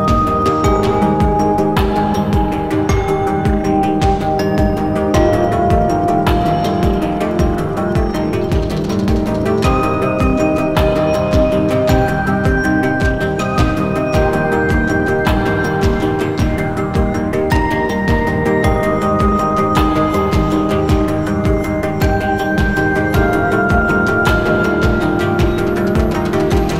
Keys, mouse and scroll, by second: 0.4-3.7 scroll up 1, 3.7-4.6 scroll down 1, 5.8 ctrl+v, 7.0 scroll up 1, 7.3 scroll down 1, 7.7 alt+click, 12.2 scroll down 1, 12.5-12.9 scroll up 2, 13.0 alt+scroll, 13.0 scroll up 1, 13.2 alt+click, 19.6 alt+click, 25.1 scroll up 1, 25.3 scroll down 1, 25.7 alt+click.